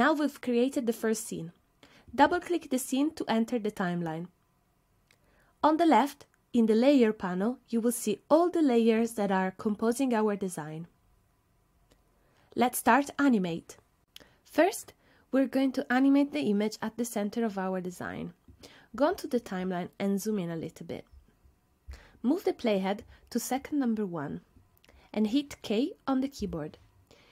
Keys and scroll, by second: 26.4 k.